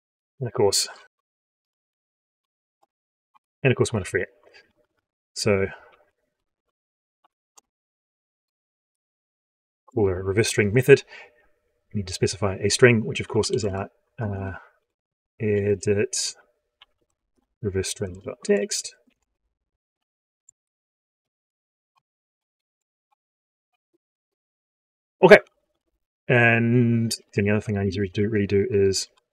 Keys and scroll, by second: 20.3 ctrl+shift+Left, 20.9 ctrl+c, 22.2 ctrl+Left, 23.5 ctrl+v.